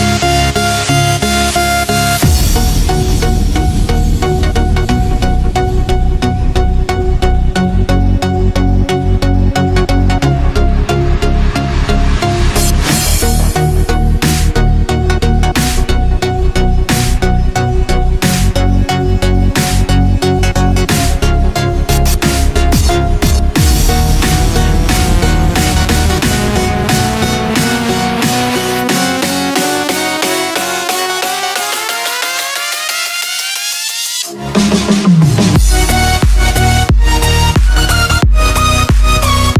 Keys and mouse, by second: 0.0-1.2 middle drag, 2.6-3.7 shift+middle drag, 4.0 middle click, 4.6-5.7 middle drag, 6.5-7.8 middle drag, 9.2-11.3 middle drag, 12.1 click, 13.4-15.6 middle drag, 17.3 click, 18.4 click, 19.8-20.9 middle drag, 22.5 click, 23.5 click, 26.8 click, 27.2 click, 27.6 middle click, 28.6 click, 29.4 Tab, 30.5-32.6 middle drag, 33.2 Tab, 36.6 shift+middle click.